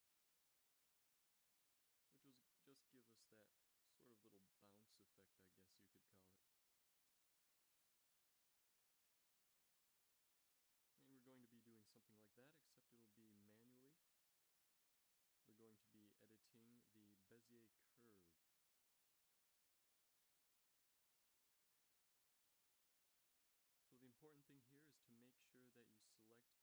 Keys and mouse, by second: 3.3 alt+a, 4.5 alt+a, 5.5-6.2 drag, 12.3 n, 13.0 n, 14.2 t, 16.3-17.4 drag, 18.6 a, 19.0 a, 20.0 t, 23.7-24.9 middle drag, 24.7 a, 25.0 b, 25.5 click.